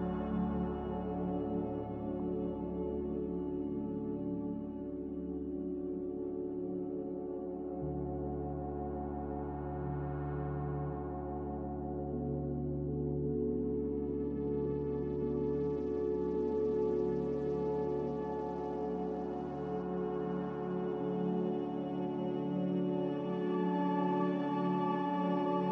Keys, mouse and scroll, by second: 14.8 a.